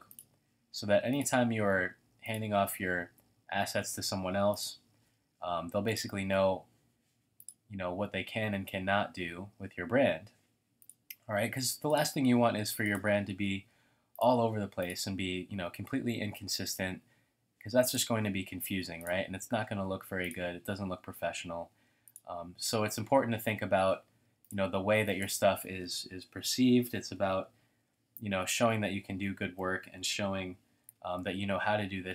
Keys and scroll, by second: 24.6-29.2 typing.